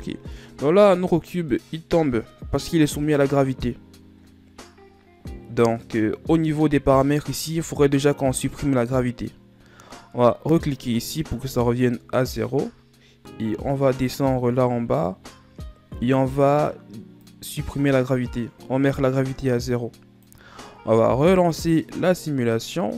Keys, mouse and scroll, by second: 1.3-2.1 shift+scroll down 5, 2.1-5.2 middle drag, 11.4 click, 14.0-17.8 scroll down 22, 17.8 click, 22.6 click.